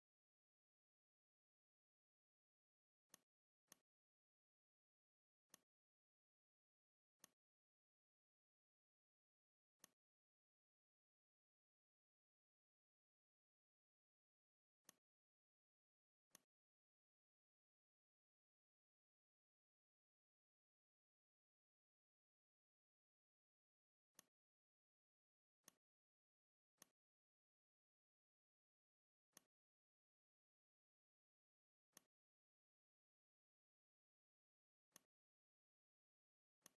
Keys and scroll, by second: 0.5 ctrl+c, 0.9 ctrl+f, 2.3 r, 4.8 v, 26.5 r, 28.2 shift+v.